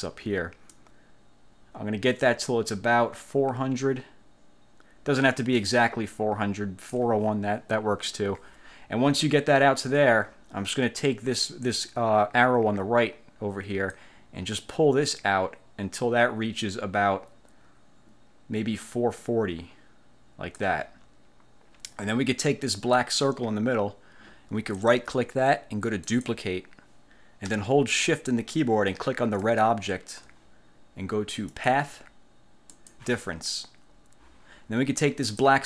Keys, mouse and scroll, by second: 0.8-7.2 ctrl+drag, 14.0-20.9 drag, 23.1 click, 25.0 click, 26.2 click, 29.6 shift+click, 31.6 click, 32.8 click, 35.4 click.